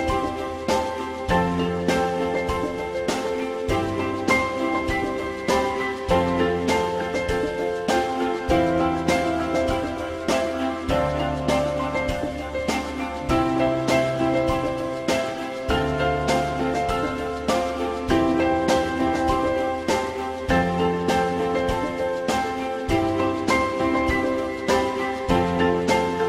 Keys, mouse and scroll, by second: 6.4 click, 9.3 click, 11.9 ctrl+click, 16.8 click, 17.9 click.